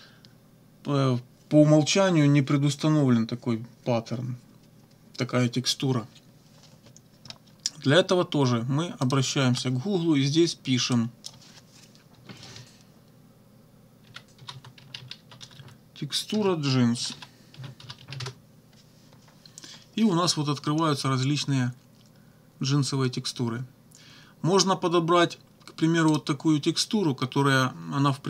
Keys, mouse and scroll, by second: 9.0 click, 11.0 click, 13.8-18.5 typing, 26.1 click.